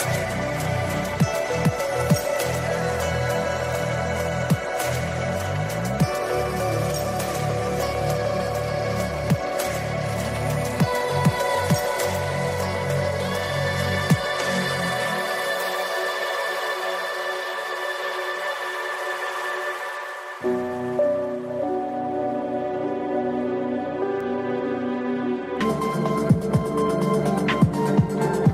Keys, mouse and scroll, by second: 0.7 click, 2.1 click, 4.4 drag, 5.8-6.9 drag, 8.1 click, 9.3-12.1 drag, 12.6 click, 15.7 click, 17.3 click, 18.2-19.5 drag, 19.9 click, 21.9-22.8 scroll up 2, 22.8 click, 24.0-25.0 scroll up 1, 25.0 click, 26.5 click.